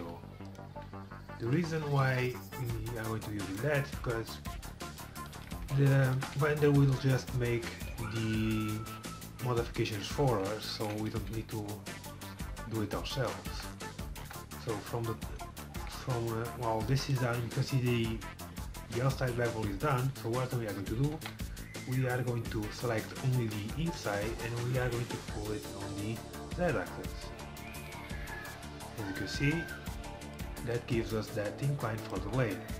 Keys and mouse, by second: 0.8 g, 3.7 g, 7.0-8.9 drag, 7.3 g, 13.2-15.1 middle drag, 14.3 KP_1, 15.8 middle click, 21.2 KP_4, 21.3 KP_1, 26.0-27.9 drag.